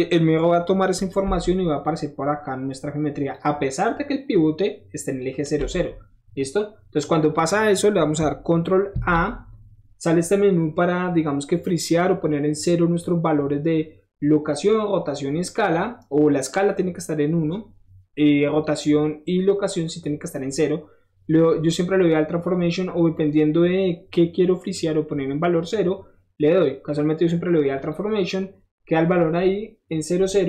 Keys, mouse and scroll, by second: 1.8-3.3 drag, 3.9-5.2 drag, 8.9 ctrl+a, 27.8 click.